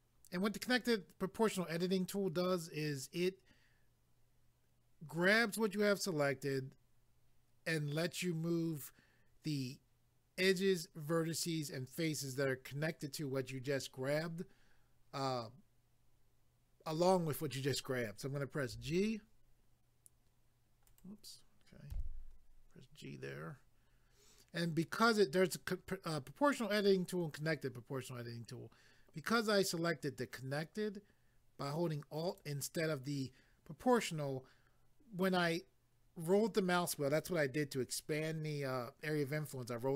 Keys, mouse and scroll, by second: 20.9 right click, 21.9 g, 23.1-23.9 scroll down 1, 27.6-27.9 scroll down 1, 32.3 click.